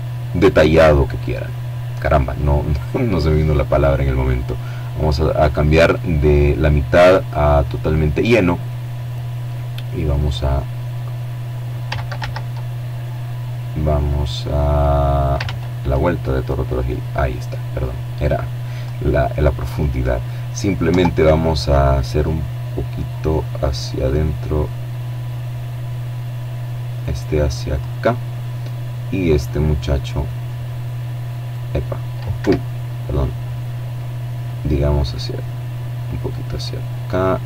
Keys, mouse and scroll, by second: 1.1 click, 5.4 click, 6.7-7.3 scroll down 2, 8.5-10.6 drag, 10.5 ctrl+z, 12.4-14.1 drag, 13.8 ctrl+z, 14.8-18.5 drag, 18.9 right click, 19.3 Tab, 21.3-25.9 right drag, 26.1 click, 26.9 right click, 28.6-30.4 right drag, 30.7 Escape, 32.8-36.1 drag, 37.0 right click.